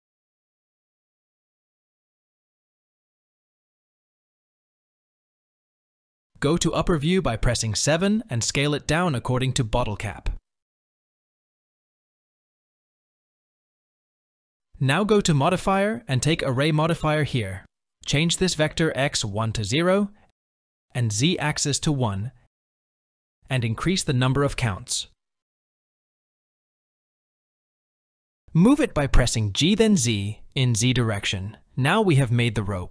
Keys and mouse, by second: 3.6 s, 6.7 KP_7, 8.2 s, 13.4 KP_1, 16.0-17.7 drag, 19.3-21.3 drag, 21.8-23.1 drag, 24.8 click, 25.3 click, 25.5 click, 25.8 click, 26.1 click, 26.3 click, 26.8 click, 27.4 click, 28.5 g, 32.1 click.